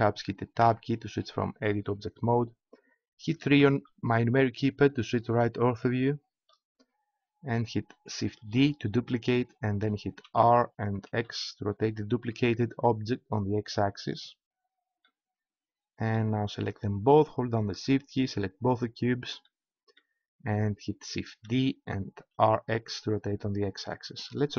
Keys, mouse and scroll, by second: 0.6 Tab, 3.5 KP_3, 8.6 shift+d, 14.1-15.7 drag, 18.7-20.4 right drag, 21.4 shift+d.